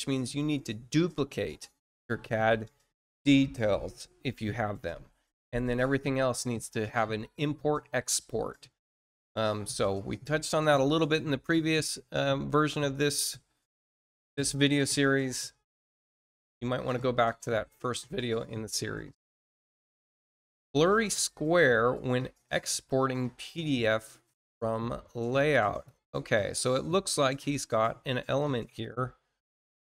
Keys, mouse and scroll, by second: 18.9-19.3 scroll down 2, 21.7 click, 23.5 middle click, 24.2 middle click, 25.6 click.